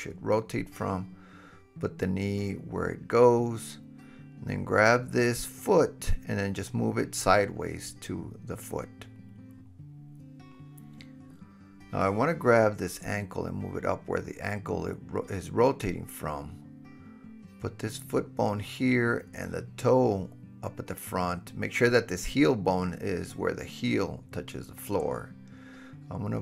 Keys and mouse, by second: 1.9 g, 2.6-4.0 drag, 4.0-6.9 middle drag, 5.4 g, 6.2-9.2 drag, 6.2-6.9 right drag, 8.6 KP_3, 13.5 g, 15.9 click, 16.9 g, 18.0 drag, 18.7 g, 19.9 click, 21.0 g, 23.3-26.4 drag, 23.3 middle click, 23.3 right click.